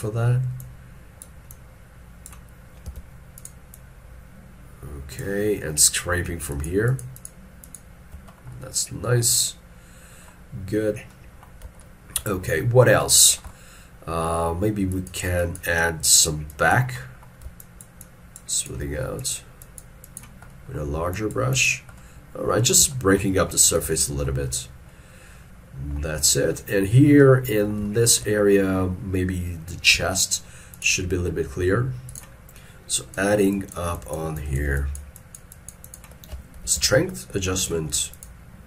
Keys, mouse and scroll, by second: 0.0 ctrl+scroll up 2, 2.9-3.8 scroll, 3.8 double click, 6.6 ctrl+click, 6.9 ctrl+click, 7.7 ctrl+click, 8.4 scroll down 1, 12.5-13.1 scroll down 1, 13.2 shift+middle click, 13.5 shift+middle click, 17.7 shift+click, 18.1 shift+click, 18.6 shift+click, 19.7 double click, 23.0 shift+middle click, 24.1 shift+middle click, 24.4-24.9 shift+scroll down 2, 27.9 middle click, 30.0 f, 34.0 double click, 36.7 double click, 36.8 shift+f, 38.2 double click.